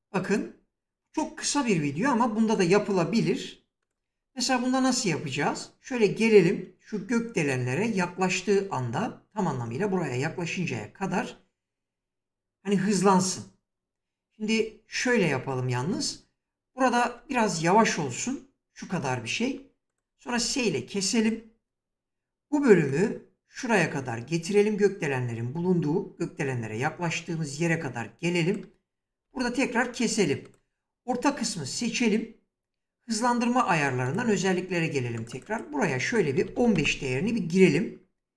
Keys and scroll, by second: 15.6 space, 20.1 s, 29.0 s, 35.9-36.8 typing.